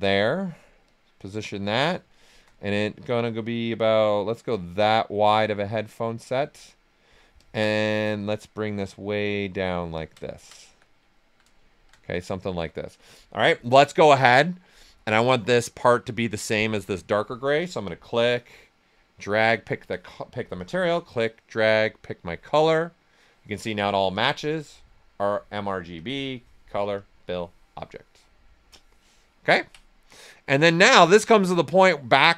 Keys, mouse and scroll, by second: 1.7 right click, 2.8-5.2 drag, 5.2-7.3 right drag, 7.3 ctrl+click, 8.1-9.9 drag, 9.9 ctrl+click, 10.1 ctrl+click, 10.2 ctrl+right click, 10.6 q, 10.8 right click, 11.1 alt+right click, 11.7 shift+f, 12.0 right click, 12.3 alt+right click, 17.8-20.5 drag, 20.5-24.1 drag, 29.4 ctrl+right click, 30.4 q, 30.8 alt+right click, 31.1 right click.